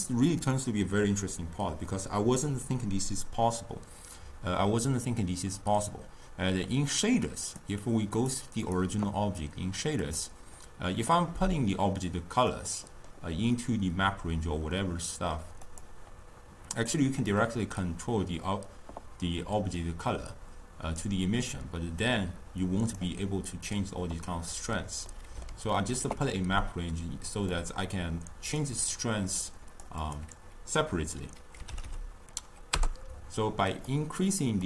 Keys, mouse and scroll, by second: 7.6 click, 8.3 click, 8.7 click, 10.2 click, 15.8 click, 17.4-23.1 drag, 25.2-28.2 middle drag, 28.2-32.9 drag, 32.9 0.